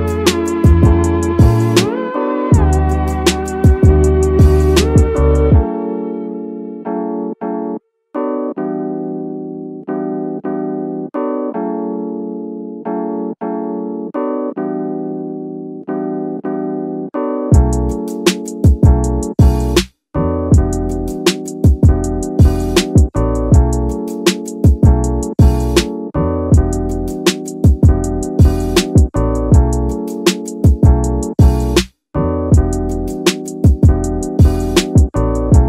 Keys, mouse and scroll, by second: 1.4 Tab, 3.2 shift+a, 5.9 click, 7.1 s, 7.4 z, 10.0 click, 11.0-12.6 drag, 13.2 shift+middle drag, 14.3 click, 14.9 shift+middle drag, 16.2-18.7 drag, 19.0 shift+middle drag, 19.5 scroll up 2, 20.2-22.7 drag, 22.9 scroll up 1, 23.1 shift+middle drag, 27.9-31.3 drag, 32.1-34.4 drag.